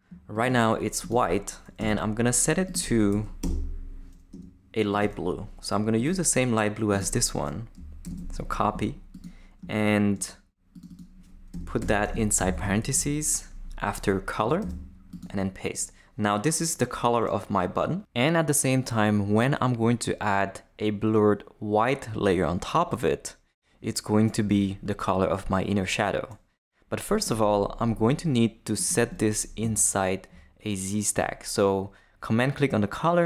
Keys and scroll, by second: 1.8 Return, 3.1 Left, 3.4 Return, 4.3 Tab, 8.0 super+c, 11.5 BackSpace, 12.1 shift+BackSpace, 12.4 shift+9, 12.9 shift+Left, 13.7 Left, 14.6 super+v.